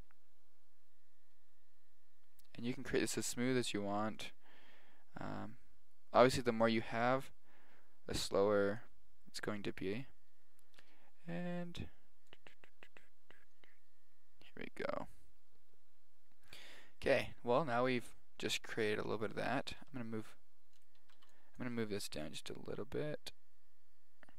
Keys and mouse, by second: 12.3 click, 14.2 click, 19.8 g, 21.0 a, 21.1 b, 21.7 g.